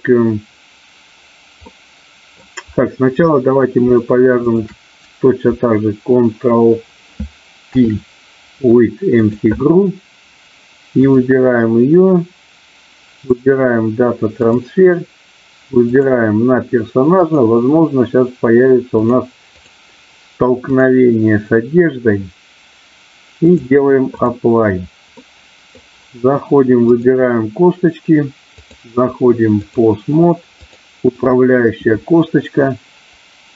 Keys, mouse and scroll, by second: 1.7 middle click, 4.4 shift+click, 7.5 ctrl+p, 13.3-14.5 drag, 15.8 click, 19.4 click, 20.8 click, 23.5 click, 25.2 middle click, 26.9 click, 28.5-29.7 drag, 30.7 click.